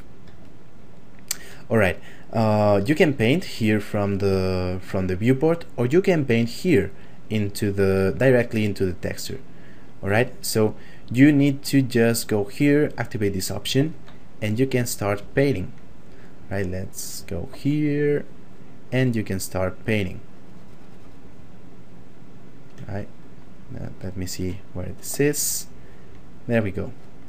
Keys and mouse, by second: 0.5 shift+middle click, 3.0 ctrl+middle click, 4.5 shift+middle click, 7.4 middle click, 8.2 ctrl+middle click, 11.1 middle click, 12.8 click, 21.6 shift+middle click, 23.3 click, 24.2 shift+middle click, 24.6 middle click, 25.4 click.